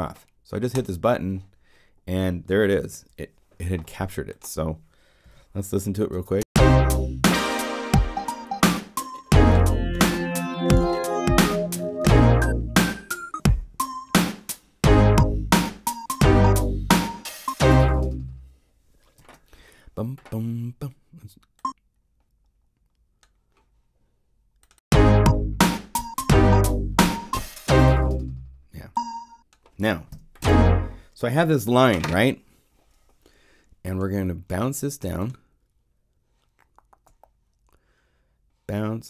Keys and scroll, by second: 5.2 p, 6.1 o, 6.3 Return, 19.1 0, 30.3 0.